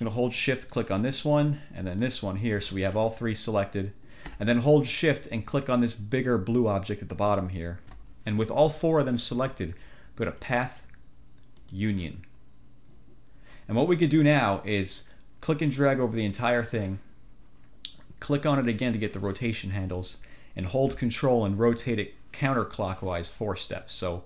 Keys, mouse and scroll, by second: 1.0 shift+click, 2.1 shift+click, 7.2 shift+click, 10.4 click, 11.7 click, 15.6-16.9 drag, 18.7 click.